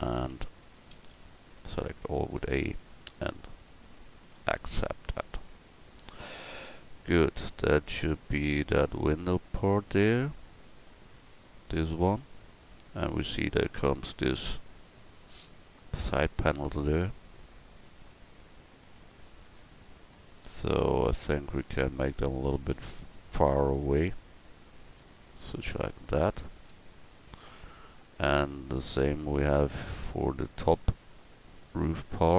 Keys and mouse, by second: 0.3 Tab, 0.9 a, 1.1 a, 2.8 Tab, 4.4 KP_1, 18.3 middle click, 21.6 Tab, 22.6 a, 23.6 l, 24.6-26.3 drag, 26.7 Tab, 27.7-29.6 middle drag, 29.7 middle click, 30.0-31.2 middle drag.